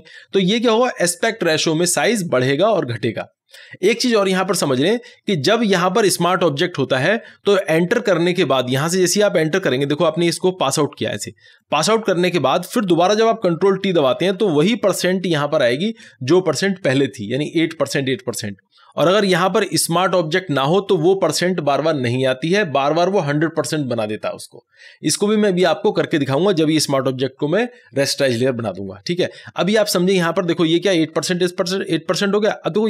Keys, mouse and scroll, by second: 4.6 click, 11.2 click, 14.0 click, 14.2 ctrl+t.